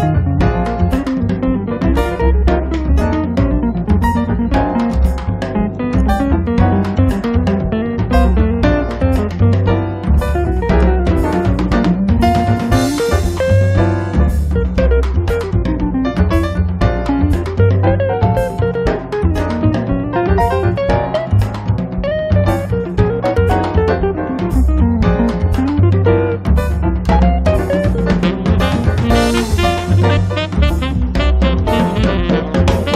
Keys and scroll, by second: 2.3 m, 3.6 5, 3.8 Return, 4.1 space, 7.9 m, 9.2 5, 9.4 Return, 9.8 space, 11.0 Escape, 17.2 space, 17.7 Escape, 19.5 space, 20.0 Escape, 30.4 space, 31.0 Escape.